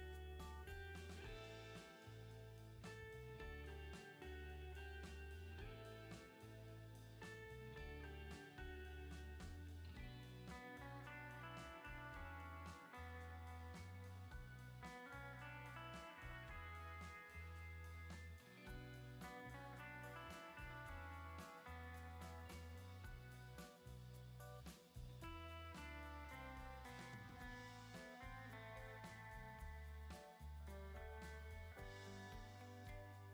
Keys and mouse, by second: 0.0 click, 2.7 shift+middle click, 2.9 shift+middle click, 3.7 shift+middle click, 4.0 alt+q, 4.7 middle click, 5.8 middle click, 6.0 shift+click, 6.1 middle click, 6.3 middle click, 8.3 middle click, 9.5-10.0 shift+middle drag, 10.9 click, 13.0 click, 13.5-13.8 drag, 14.5 ctrl+z, 15.5 click, 15.9 click, 17.0 middle click, 17.5 shift+middle click, 17.9 shift+middle click, 19.5 shift+middle click, 22.2 shift+click, 22.3 shift+middle click, 22.5 shift+click, 22.6-23.8 shift+middle drag, 24.0 shift+middle click, 24.3 middle click, 24.8-25.2 drag, 28.0 shift+middle click, 28.8 click, 29.1 click, 29.8 click, 30.4 shift+click, 30.8 click, 31.4 click, 31.7 l, 32.2 click, 32.2 l.